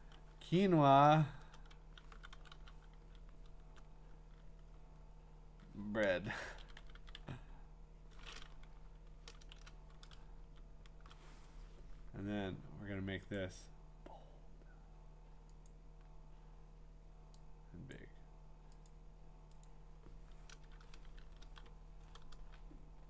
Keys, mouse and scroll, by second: 1.3-3.5 typing, 6.0-7.7 typing, 9.5 shift+Return, 10.4 Down, 13.4 click, 15.7 click, 17.9 click, 18.9 click, 19.7 click, 20.6 Return, 21.4 ctrl+v, 22.6 middle click, 22.7-23.0 scroll down 4.